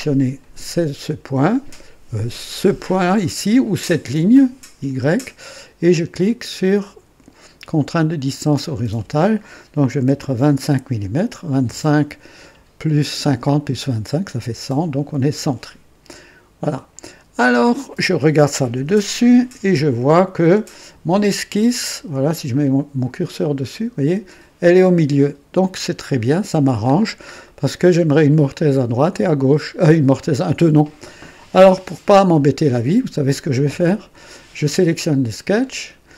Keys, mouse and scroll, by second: 0.3 click, 4.8 click, 7.6 click, 10.0 KP_2, 10.3 KP_5, 11.6 KP_Enter, 16.6 click, 18.7 KP_2, 26.9 scroll down 2, 27.4-28.1 right drag.